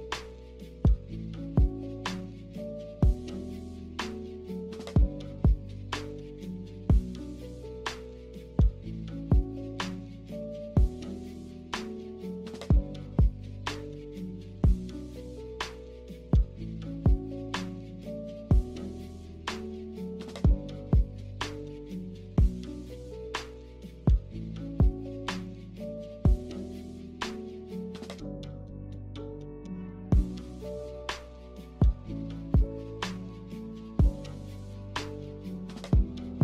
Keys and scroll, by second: 8.6 Delete, 11.3 a, 12.9 z, 18.9 a, 31.5 ctrl+z, 32.6 z.